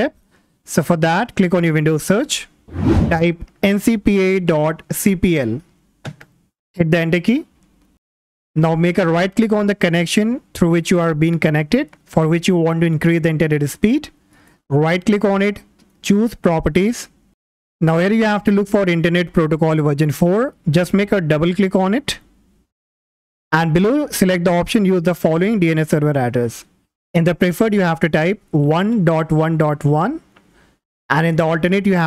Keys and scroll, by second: 2.8-4.1 typing, 5.9-6.9 typing.